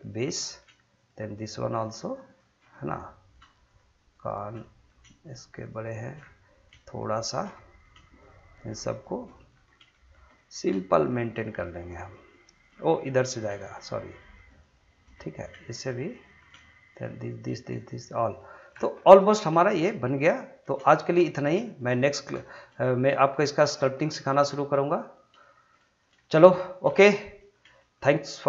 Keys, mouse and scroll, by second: 0.4 middle click, 1.0 shift+click, 2.7 middle click, 3.6 shift+click, 5.0 middle click, 5.2 shift+click, 6.2-6.7 shift+scroll down 1, 6.8 shift+middle click, 8.2 shift+click, 9.3 middle click, 9.7 scroll up 1, 9.9 shift+middle click, 10.3 middle click, 10.9 shift+click, 12.5 shift+click, 12.8 middle click, 13.7 shift+click, 15.1 middle click, 15.7 shift+click, 16.2 middle click, 16.9 shift+click, 18.7-19.5 shift+scroll down 3, 19.0 middle click, 19.6 shift+middle click, 20.0-20.3 scroll up 1, 20.3 middle click, 20.9 shift+middle click, 21.6 shift+middle click, 21.9 middle click, 22.4 shift+middle click, 22.8 middle click, 23.4 shift+middle click, 23.8 middle click, 24.2 shift+middle click, 24.5 middle click, 25.0 scroll up 1, 25.4 shift+middle click, 26.2 shift+middle click, 26.9 shift+middle click, 27.8 shift+middle click.